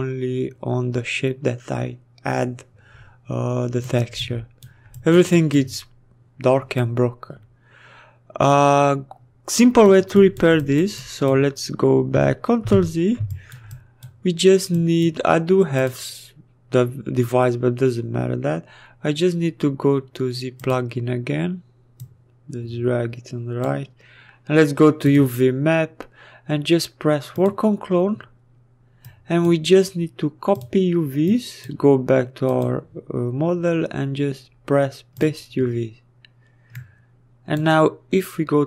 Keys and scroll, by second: 11.5 ctrl+z.